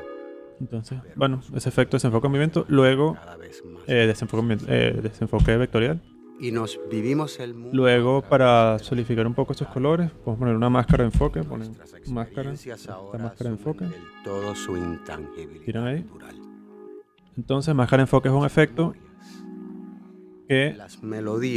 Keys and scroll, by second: 5.3 BackSpace, 10.8 m, 11.2 a, 16.3 space.